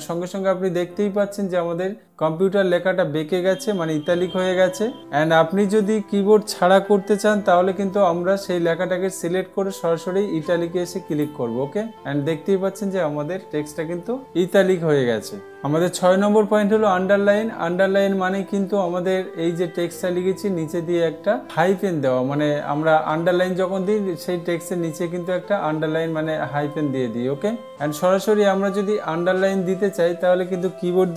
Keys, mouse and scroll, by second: 8.0 ctrl+z, 11.7 click.